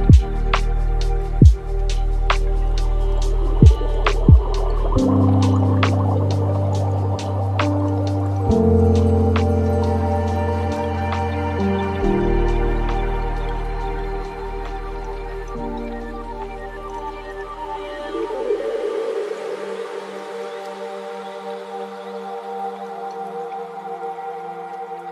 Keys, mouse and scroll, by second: 4.8-5.8 middle drag, 5.8-8.9 shift+drag, 11.0-13.7 drag, 13.7 scroll down 3, 14.1-15.3 middle drag, 15.3-20.1 drag, 24.6-25.1 drag.